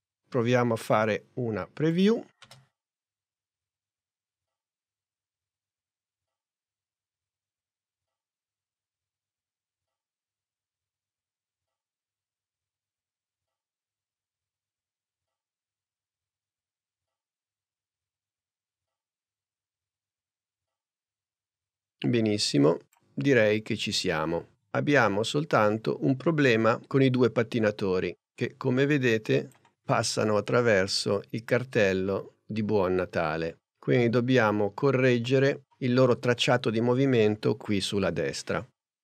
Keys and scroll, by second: 2.5 space.